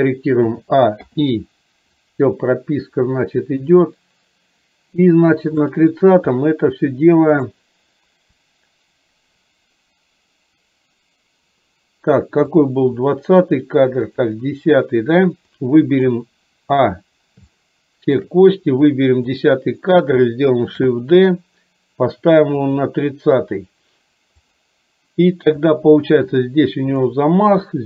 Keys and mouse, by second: 0.5 a, 1.1 i, 2.1-5.8 drag, 7.5 click, 12.5 click, 14.3 click, 15.6 click, 16.9 a, 17.6 shift+middle click, 19.0 click, 20.9 shift+d, 24.5 click, 25.8 click, 27.0 click.